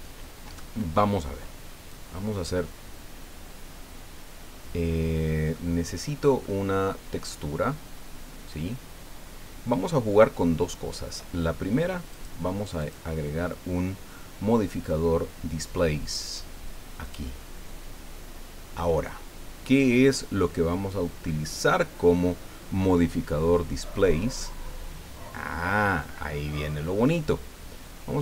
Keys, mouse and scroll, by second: 1.9 click, 5.5-6.6 drag, 12.1 click, 12.8 click, 17.0 click.